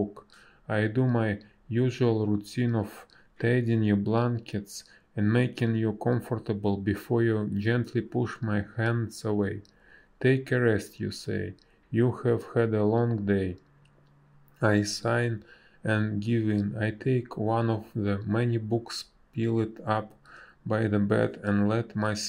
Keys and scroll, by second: 0.1 space, 3.2 space, 11.8 space, 17.6 space, 19.7 ctrl+z, 20.7 space.